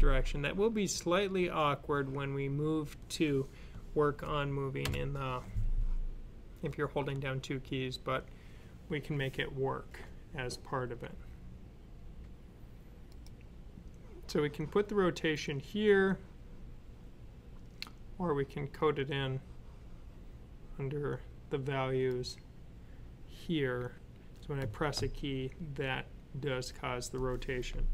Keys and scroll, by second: 4.7 alt+F9.